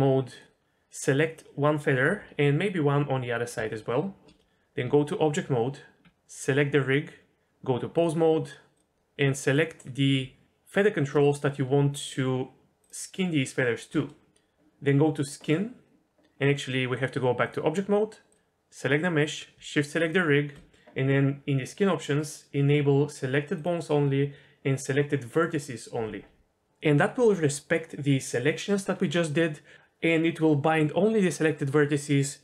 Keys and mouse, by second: 0.6 alt+a, 2.0 l, 3.5 l, 4.8 Tab, 8.0-8.8 drag, 9.4 click, 12.0 shift+click, 17.0-17.5 drag, 20.0 shift+click, 23.5 click, 25.3 click.